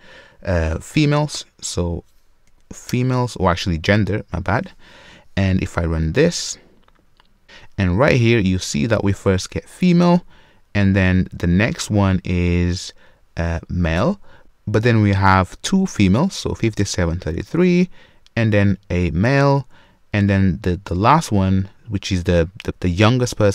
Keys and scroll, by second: 3.0 Return, 7.1 ctrl+F5.